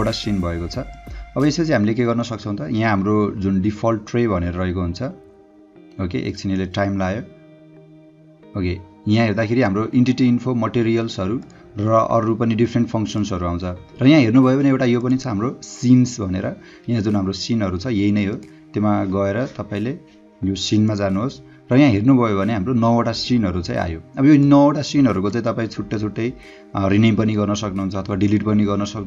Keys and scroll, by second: 2.0 space.